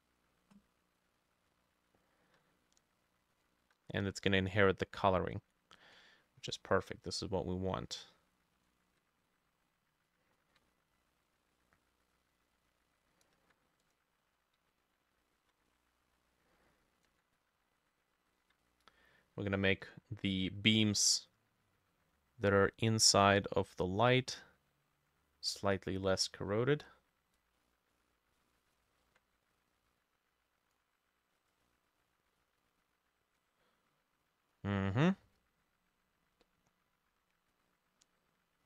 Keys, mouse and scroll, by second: 0.0-2.3 ctrl+drag, 0.0-2.3 ctrl+middle drag, 6.5-18.4 ctrl+drag, 8.3 ctrl+middle click, 10.6-13.8 ctrl+middle drag, 14.7 ctrl+middle click, 15.4 ctrl+d, 15.8-17.5 ctrl+middle drag, 17.8 ctrl+middle click, 18.4 ctrl+d.